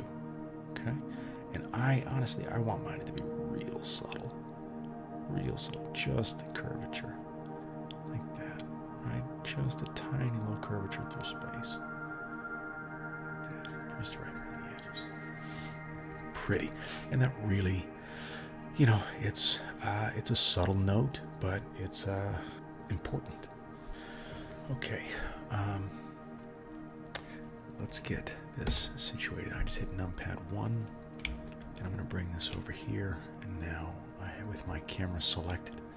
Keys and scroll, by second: 28.7 KP_1.